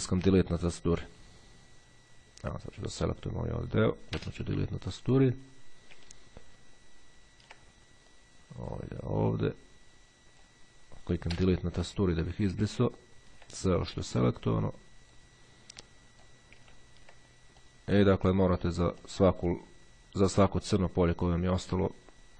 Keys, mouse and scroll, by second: 0.9-3.5 drag, 4.2 Delete, 5.5-6.0 scroll up 1, 6.3-6.9 ctrl+scroll down 1, 6.9-7.3 ctrl+scroll down 1, 7.7-8.3 ctrl+scroll down 1, 8.3-11.1 drag, 11.4 Delete, 12.9-13.7 ctrl+scroll up 1, 14.4 click, 16.0 click, 16.8-17.4 ctrl+scroll up 2, 17.8 click, 19.2-21.1 drag, 21.6 click.